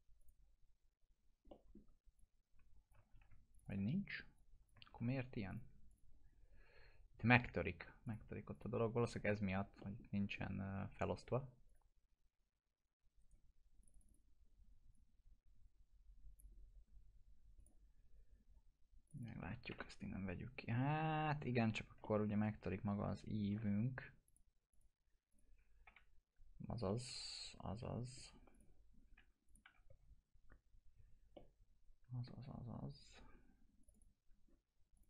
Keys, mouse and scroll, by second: 0.2 click, 0.7 scroll down 1, 1.5 alt+middle click, 2.1-3.1 click, 3.1 ctrl+z, 3.5 click, 4.9 ctrl+z, 5.5 click, 9.5-10.1 scroll down 2, 9.8 middle click, 10.4 middle click, 10.6-11.0 scroll down 1, 11.6 click, 13.2 right click, 13.8-16.4 drag, 17.9-19.0 scroll up 1, 19.0 click, 19.7 ctrl+BackSpace, 21.5 ctrl+z, 22.0-23.5 alt+middle drag, 24.2 click, 25.8 F4, 26.5 scroll down 1, 26.8-28.1 alt+middle click, 28.1-28.5 scroll up 2, 28.5 click, 29.6 F4, 31.3-32.2 alt+middle drag, 33.8 click.